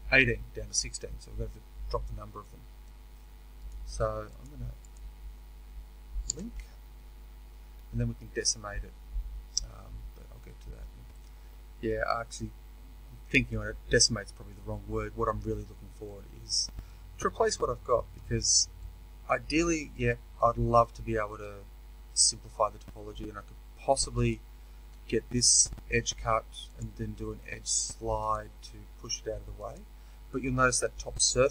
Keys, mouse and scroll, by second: 4.8 click, 6.2 ctrl+l, 6.2-10.2 middle drag, 11.1 right click, 11.7 middle click, 12.3 right click, 13.2 middle click, 14.1 right click, 14.2-24.2 middle drag, 24.2 alt+click, 28.2-31.5 drag.